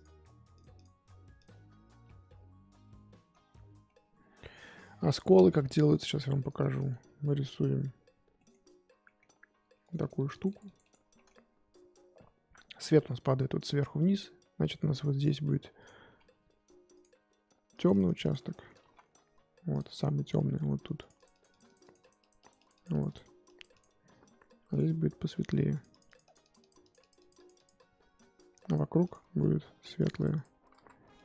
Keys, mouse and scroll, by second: 0.5-1.8 drag, 1.8 scroll down 1, 2.0-3.4 middle drag, 3.4-3.8 scroll up 3, 3.8 middle click, 4.5-5.5 scroll up 4, 6.0 click, 6.2-8.6 middle drag, 8.6-9.0 scroll up 2, 9.0 middle click, 9.3-9.8 scroll up 1, 9.8-11.1 drag, 11.1 middle click, 11.4-13.6 scroll up 1, 13.6-15.6 scroll up 2, 15.6 scroll up 1, 15.8 click, 16.1 f, 17.7-18.8 drag, 18.8 ctrl+z, 19.7 click, 21.0-24.7 drag, 25.7-28.7 drag, 29.9 click, 30.7 ctrl+z, 31.1 click.